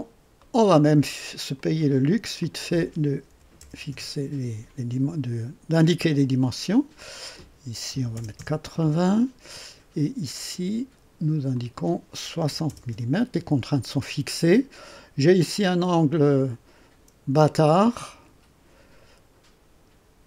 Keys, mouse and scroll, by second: 0.4 right click, 1.5 click, 2.3 click, 3.2 KP_5, 3.5 KP_0, 3.8 KP_Enter, 5.7 click, 6.9 click, 7.9 KP_8, 8.1 KP_0, 8.3 KP_Enter, 10.3 click, 11.5 click, 12.4 KP_6, 12.6 KP_0, 12.9 KP_Enter, 13.9 scroll down 1, 14.3 right click, 16.3 click, 18.0 click.